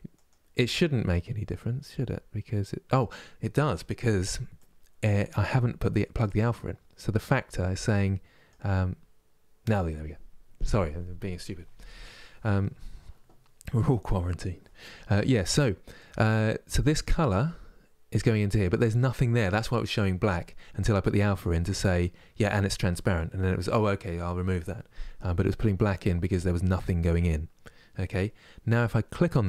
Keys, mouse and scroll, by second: 15.7-28.9 drag.